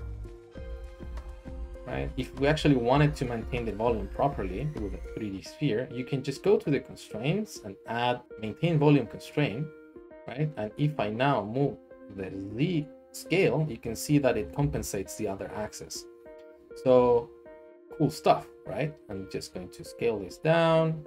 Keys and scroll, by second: 0.5 typing, 2.3 ctrl+z, 2.5 ctrl+z, 2.9 ctrl+z, 14.6 ctrl+z.